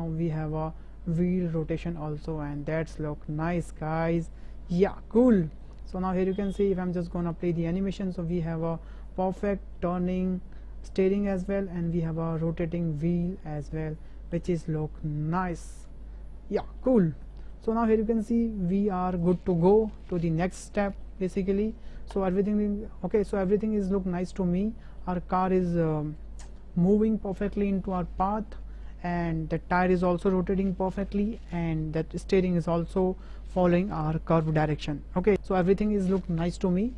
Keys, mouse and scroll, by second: 2.6 middle drag, 2.9-3.9 drag, 3.9-5.1 drag, 5.3 click, 6.8-7.3 shift+middle drag, 7.5 space, 9.4 space, 9.7-10.2 drag, 11.8-12.3 drag, 12.3 middle drag, 12.9-13.9 middle drag, 13.9-14.3 shift+drag, 14.5 space, 15.9 space, 16.8 drag, 17.4 shift+drag, 17.7 drag, 19.2 click, 20.0 shift+click, 20.8 middle drag, 21.5 shift+middle drag, 22.2-22.5 shift+middle drag, 23.7 shift+middle drag, 24.2-24.5 middle drag, 24.8 shift+middle click, 25.6 shift+drag.